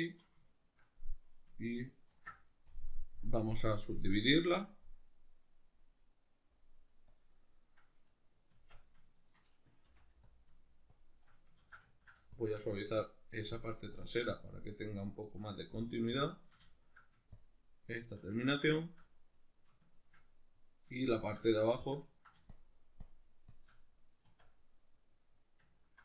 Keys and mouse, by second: 0.5-2.1 shift+middle drag, 2.1 ctrl+r, 7.4-8.6 right drag, 8.6 Tab, 9.1-10.4 shift+middle drag, 9.8 f, 10.4 click, 11.0 shift+click, 11.6 ctrl+z, 11.9 ctrl+middle click, 12.4-16.7 shift+drag, 16.7 shift+middle click, 17.4-18.4 shift+drag, 18.4-22.5 ctrl+middle drag, 22.5-23.6 shift+drag, 23.8-26.0 middle drag, 24.2 Tab.